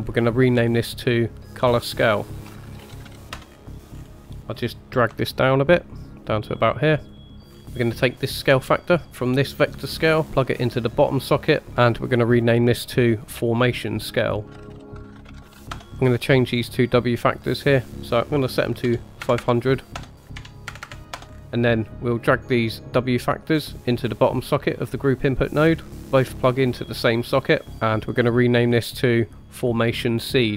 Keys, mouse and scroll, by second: 0.5 click, 0.7-3.3 drag, 3.5-5.1 scroll down 4, 3.6 middle click, 5.1-6.3 scroll down 1, 5.1 g, 7.1-7.6 scroll up 4, 7.2 middle click, 7.6 middle click, 8.8 click, 9.1-11.4 drag, 12.4 click, 12.7 click, 15.7 middle click, 15.9-16.3 scroll down 2, 16.5 scroll up 3, 17.8-19.9 drag, 19.3 KP_0, 20.1-21.1 drag, 20.8 KP_0, 21.2-21.6 scroll down 5, 21.4 middle click, 21.4 scroll up 2, 22.2 scroll up 1, 23.9-25.3 drag, 25.9-27.5 drag, 28.6 click, 28.8-30.5 drag.